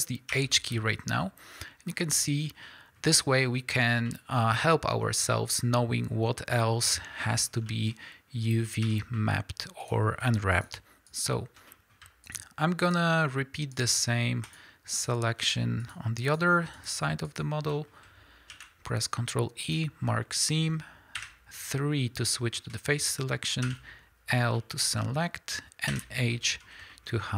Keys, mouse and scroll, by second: 0.3 h, 9.8 click, 10.5 drag, 11.1 shift+click, 11.9 middle click, 12.2 shift+click, 12.8 shift+click, 13.1-13.7 shift+middle drag, 13.7 shift+drag, 14.4 shift+click, 14.9 shift+click, 16.2 shift+click, 16.7 shift+click, 17.2 shift+click, 17.7 middle click, 18.5 ctrl+e, 21.2 3, 22.6-27.3 middle drag, 23.6 l, 24.2-24.6 scroll down 2.